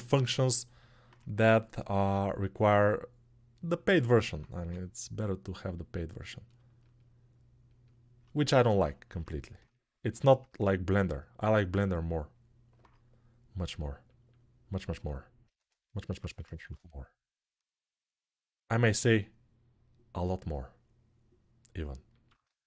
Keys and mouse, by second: 1.7 ctrl+r, 3.5-4.7 alt+middle drag, 4.3 2, 4.7 click, 4.8 middle click, 5.0-6.3 drag, 6.3-7.6 shift+middle drag, 7.6 shift+click, 8.0-9.8 alt+shift+middle drag, 9.8 shift+click, 10.0-13.9 alt+middle drag, 13.9-22.0 drag, 16.2 shift+e, 22.0-22.6 alt+shift+middle drag.